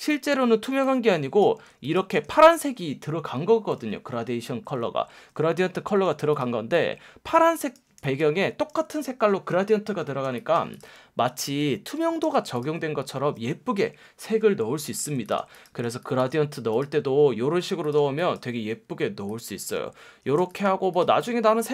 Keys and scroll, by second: 1.6 space, 2.1 super+space, 7.8 space, 8.4 super+space, 10.2 space, 11.6 super+z, 12.2 super+z, 14.8 v, 15.4 space, 15.9 super+space, 18.0 space, 20.4 space.